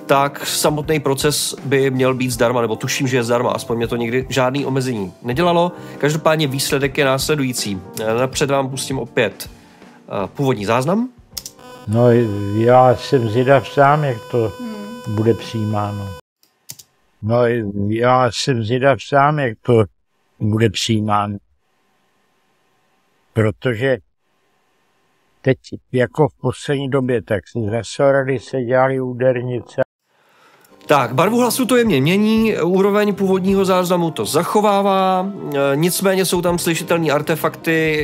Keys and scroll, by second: 11.3 space, 15.9 space, 16.7 space.